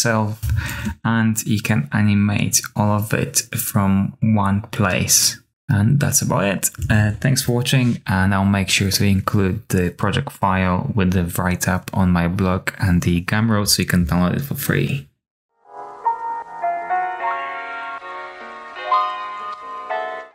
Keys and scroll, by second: 6.7 super+s.